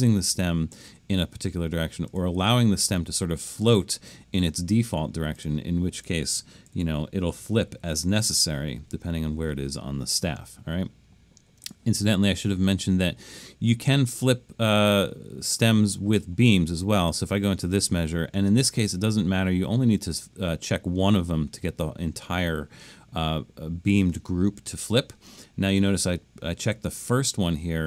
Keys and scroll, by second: 6.5-8.8 typing.